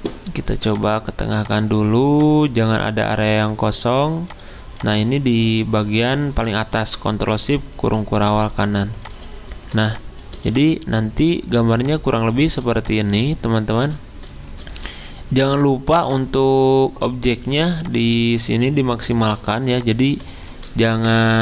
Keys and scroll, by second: 7.3 ctrl+shift+].